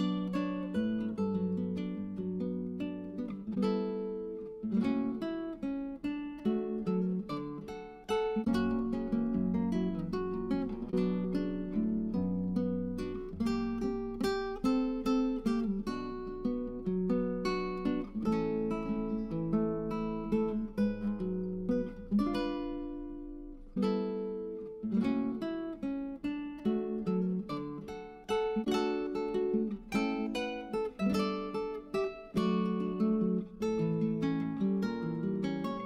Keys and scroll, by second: 25.7 BackSpace, 25.9 BackSpace, 27.0 space, 27.2 2, 30.1 1.